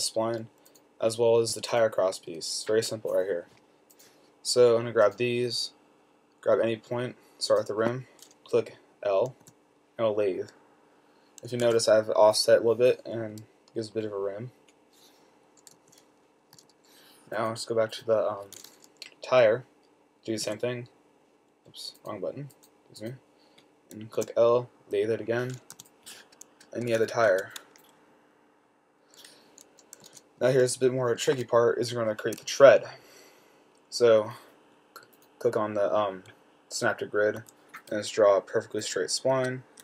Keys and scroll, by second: 2.5 ,, 9.7 l, 13.3-14.0 typing, 15.8-16.8 typing, 20.7 ,, 24.5 typing, 25.8-26.5 typing, 27.6 typing, 31.4-32.4 typing, 37.7 a, 39.6 Escape.